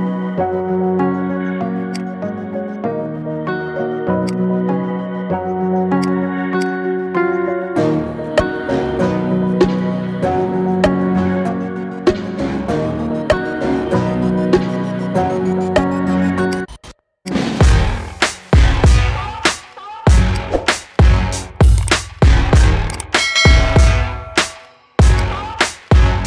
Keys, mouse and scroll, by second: 4.5 s, 6.3-7.5 drag, 7.5 g, 17.0-18.0 drag, 18.0 KP_3, 18.9 g, 20.3-20.7 scroll up 2, 20.7-21.3 shift+middle drag, 21.3 Tab, 21.6-22.5 scroll up 2, 22.8 click, 23.7 e.